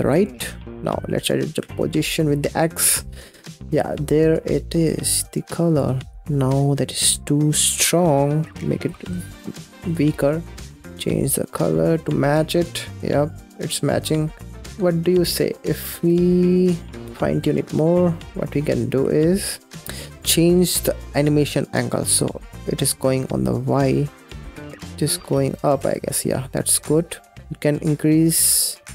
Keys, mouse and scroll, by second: 0.5 click, 0.7 scroll up 5, 0.8 middle click, 1.4-4.4 drag, 5.9 scroll down 4, 6.2 middle click, 6.2 scroll up 6, 6.6-6.9 scroll down 6, 6.9-8.3 middle drag, 8.3 click, 8.7 click, 8.9 typing, 9.4 click, 10.4 click, 12.7 click, 13.0 scroll down 6, 13.3-13.9 middle drag, 13.9 scroll up 4, 14.4 scroll down 1, 14.6 space, 15.2 Tab, 15.4 scroll down 2, 15.8 space, 16.2 middle click, 16.8 space, 16.9 ctrl+z, 17.3 ctrl+z, 17.9-18.5 scroll up 4, 18.5 middle click, 18.8 g, 19.7-20.3 scroll up 9, 20.3-23.6 middle drag, 23.6 space, 25.6 space, 26.2 middle click, 26.6 scroll down 4, 26.9 middle click, 27.2 scroll up 5, 27.4 ctrl+z, 27.6-28.9 shift+drag.